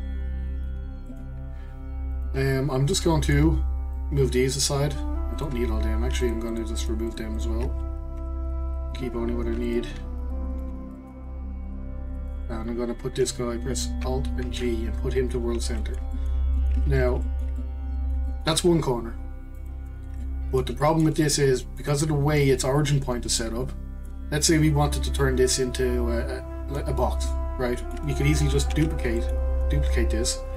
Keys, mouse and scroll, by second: 0.7 g, 2.7 2, 4.5 click, 5.4 click, 6.2 shift+click, 6.5 shift+click, 6.8 shift+drag, 7.0 shift+click, 7.4 shift+click, 8.2 Delete, 8.9 click, 9.7 shift+click, 10.6 g, 12.3 click, 14.4 alt+g, 15.8-16.8 middle drag, 16.8-17.2 scroll up 1, 17.2-19.6 shift+middle drag, 19.6-20.2 drag, 20.2-26.4 middle drag, 27.2-28.7 middle drag, 28.7 shift+d.